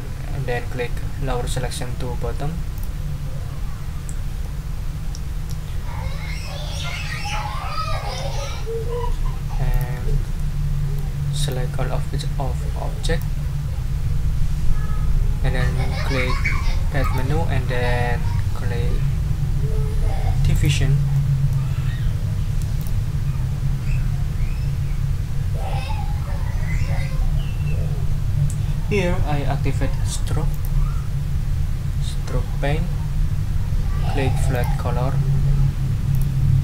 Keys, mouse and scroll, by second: 2.7 click, 4.4-5.7 middle drag, 9.7 click, 10.3 click, 11.5-13.4 drag, 17.0 click, 20.5 click, 21.1 middle click, 22.8 click, 30.5 click, 34.5 click, 36.1 click.